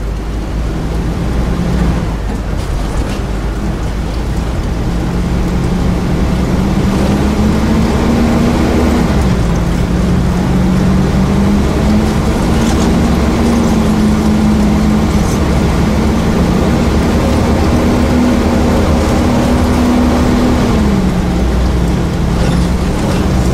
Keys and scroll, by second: 1.8 e, 8.9 e, 12.5 a, 14.4 a, 15.6 a, 19.1 a, 19.7 a, 21.6 a, 22.2 a, 22.8 a.